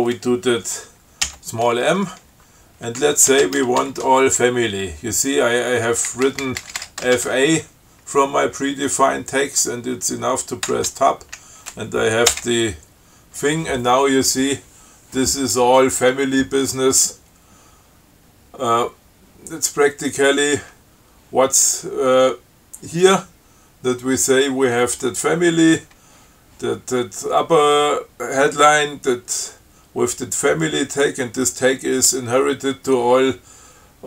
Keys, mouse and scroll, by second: 1.5 m, 3.3-4.2 typing, 6.1-8.0 typing, 11.0 Tab, 12.6 Return, 20.3-20.8 scroll down 4.